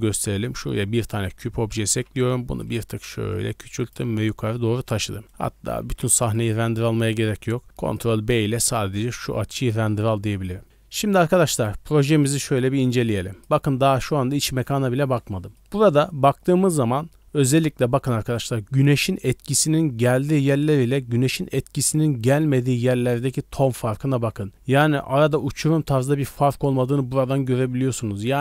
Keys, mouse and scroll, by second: 1.2 click, 1.5 s, 3.0 g, 4.2 scroll up 1, 4.5 middle click, 5.1 shift+middle click, 5.7 ctrl+b, 11.3 click, 12.8 click, 15.4-16.4 scroll up 4, 15.5 middle click, 16.1 middle click.